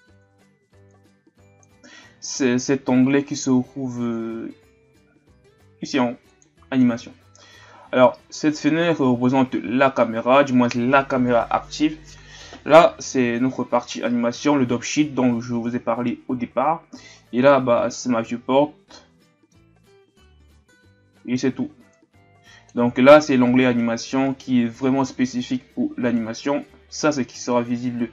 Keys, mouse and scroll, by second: 18.2-18.9 scroll down 1, 18.9-19.9 middle drag, 19.9-20.6 scroll up 3, 20.6-21.9 middle drag, 21.9-28.1 drag.